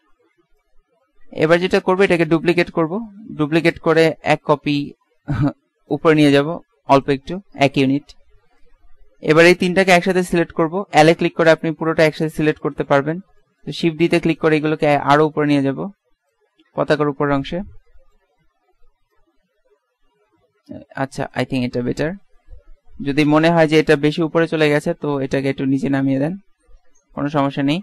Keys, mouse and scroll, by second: 0.7 click, 3.5 shift+d, 6.6 shift+d, 7.8-9.1 drag, 10.3 l, 11.2 l, 11.7 l, 13.9 shift+d, 19.2-21.0 drag, 22.6 z, 23.2 a, 24.4 b, 27.6 Tab.